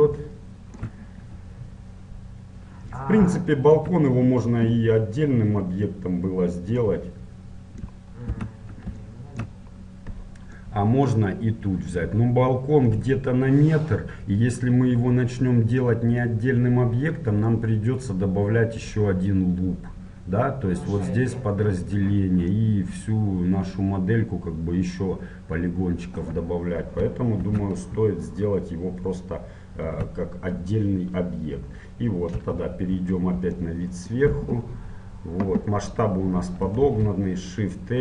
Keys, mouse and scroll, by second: 0.3-2.9 scroll up 1, 2.9-3.5 scroll down 1, 7.0-8.9 middle drag, 8.5 Tab, 9.1-12.8 middle drag, 22.7-24.7 middle drag, 27.1-30.2 middle drag, 27.6 Tab, 32.5 KP_7, 33.6-36.8 middle drag, 36.9 shift+a.